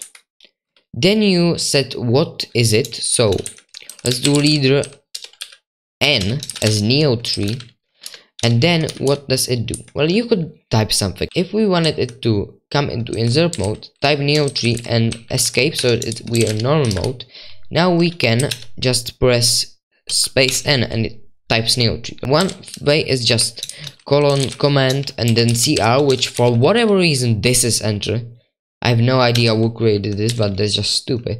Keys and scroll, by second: 0.0-0.1 typing, 4.3-9.7 typing, 5.4 Right, 6.2 Escape, 8.0 Return, 11.2-18.9 typing, 20.1-20.5 typing, 22.0-26.9 typing, 29.3-31.2 typing.